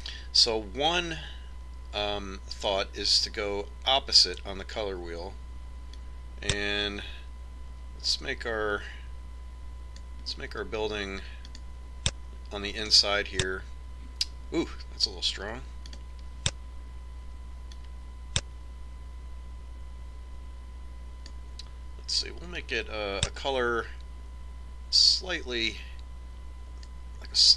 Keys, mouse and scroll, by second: 12.0-14.0 drag, 16.4-18.2 drag.